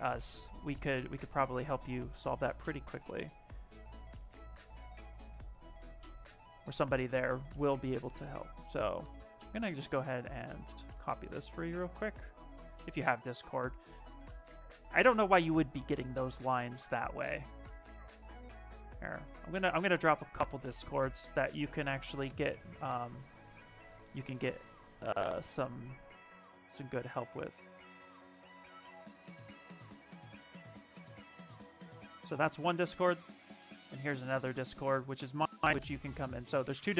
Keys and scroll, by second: 11.2 Escape, 12.6 ctrl+v, 13.0 Return, 15.2 alt+Tab, 24.9 Escape, 31.6 Escape, 33.1 ctrl+v, 33.5 Return.